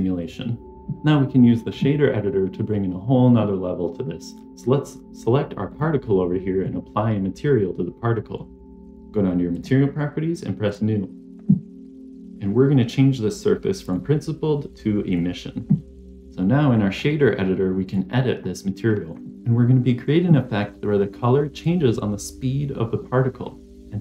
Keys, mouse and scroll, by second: 0.6 click, 0.6 middle click, 0.6 scroll down 2, 5.6 click, 9.4 click, 10.6 click, 13.7-15.1 drag, 16.1 middle click, 16.2 click, 17.7 scroll up 1.